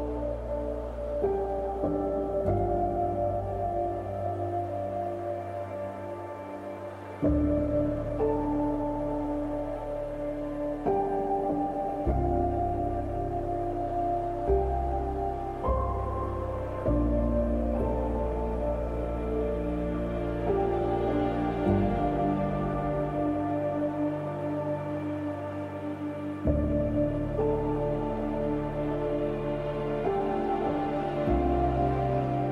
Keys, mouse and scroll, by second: 0.1 click, 0.5 space, 5.3-11.3 drag, 11.8 click, 13.0-14.0 scroll down 1, 14.0-14.5 scroll up 1, 14.5-15.3 scroll down 1, 15.3-16.7 scroll up 1, 17.5 alt+click, 19.4 ctrl+z, 19.8-20.6 scroll down 1, 20.6 scroll up 1, 22.4-23.2 scroll down 2, 23.2-25.7 scroll up 1, 25.7-26.5 scroll down 2, 26.5 click, 28.5-30.2 scroll up 1, 30.6 scroll up 1, 31.6-32.3 scroll down 1, 32.4 scroll up 1.